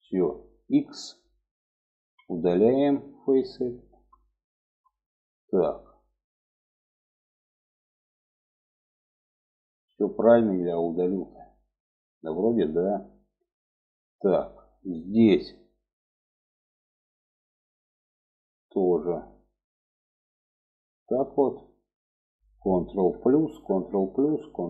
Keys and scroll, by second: 1.3 x, 22.4 ctrl+KP_Add, 22.8 ctrl+KP_Add.